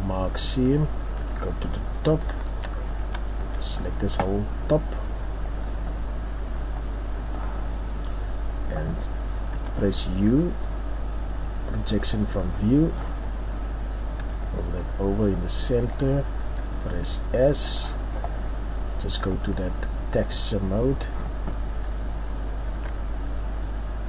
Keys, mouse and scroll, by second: 0.0 ctrl+e, 1.2 KP_7, 2.3-3.4 shift+scroll up 5, 3.0 a, 3.8-4.3 scroll down 4, 20.8 click, 22.1 s.